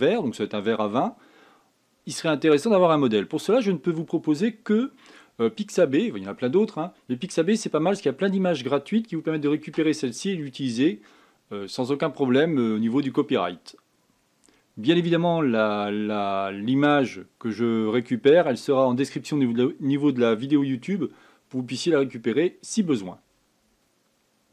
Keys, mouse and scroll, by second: 0.2-23.8 scroll down 1, 23.8-24.5 scroll down 1.